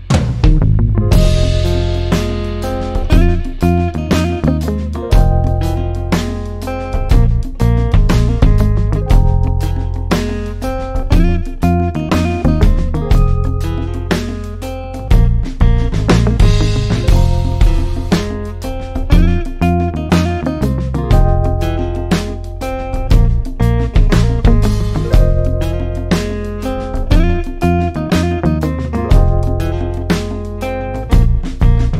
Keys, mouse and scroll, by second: 18.6-31.9 drag.